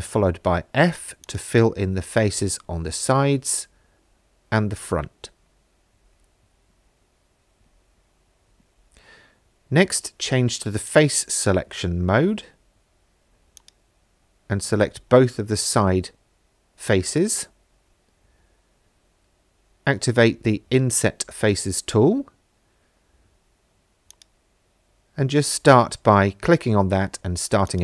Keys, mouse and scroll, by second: 1.2 alt+click, 2.2 f, 3.5 alt+click, 4.9 f, 7.9 3, 10.9 click, 13.6 shift+click, 16.3 t, 20.9 click, 24.1 click, 24.5 click, 27.7-27.8 drag.